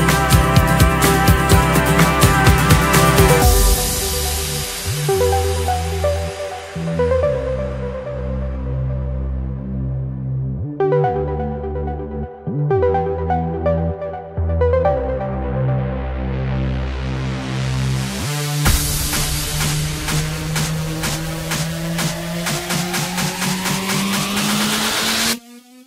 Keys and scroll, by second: 2.0 F10, 5.3 Escape, 6.4 alt+7, 6.6 alt+a, 7.0 Escape, 7.7 Return, 8.8 Escape, 9.6 alt+7, 9.8 alt+a, 10.0 Escape, 11.3 Return, 12.4 F10, 12.8 Return, 13.9 F10, 14.4 Return, 17.3 Escape, 18.1 alt+7, 18.5 alt+a, 18.5 Escape, 23.4 Return, 23.7 F10, 25.5 Return.